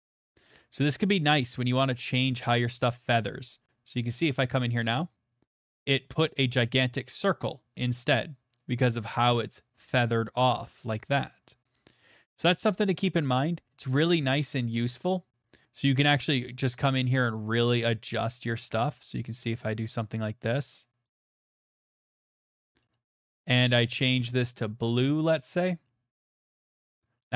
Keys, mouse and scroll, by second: 0.0 click, 2.5 click, 5.1 click, 6.4 middle click, 6.4 middle click, 6.5 middle click, 8.0 middle click, 12.1 click, 13.0 click, 13.9 middle click, 14.3 click, 14.6 click, 15.4 click, 17.1 click, 18.4 click, 19.2 click, 21.0 click, 22.3 click, 22.8 middle click, 23.7 scroll, 24.8 click, 25.3 middle click, 25.8 middle click, 26.5 click, 27.1 middle click.